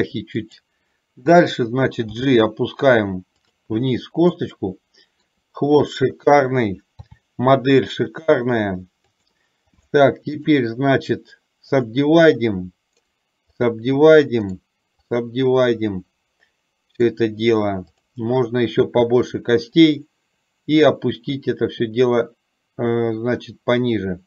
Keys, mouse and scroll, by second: 0.6 click, 2.2 g, 4.6-5.6 shift+middle drag, 7.2 e, 9.9 click, 19.9-24.2 drag.